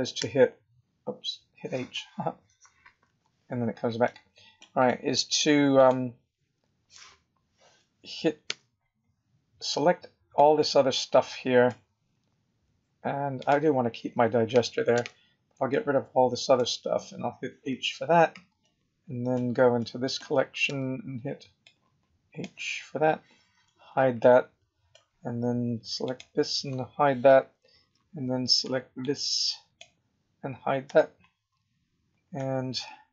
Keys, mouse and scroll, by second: 0.3 h, 3.0 h, 4.0 middle click, 4.9 middle click, 5.7 click, 8.4 b, 13.3 click, 14.9 b, 17.7 h, 18.6 middle click, 18.6 scroll down 1, 19.7 middle click, 20.6 b, 23.5 h, 24.1 middle click, 26.0 click, 27.3 h, 28.6 b, 30.9 h, 31.4-32.1 scroll up 5, 32.3 middle click.